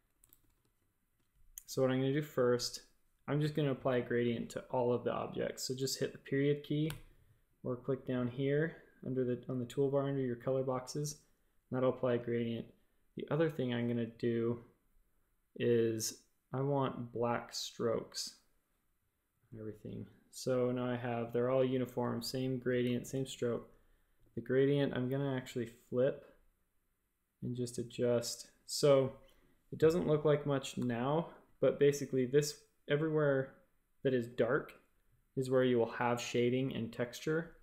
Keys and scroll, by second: 0.3 shift+super+a, 0.5 space, 1.1 space, 6.8 ., 10.9 typing, 13.2 typing, 21.9-24.1 typing, 30.7 typing.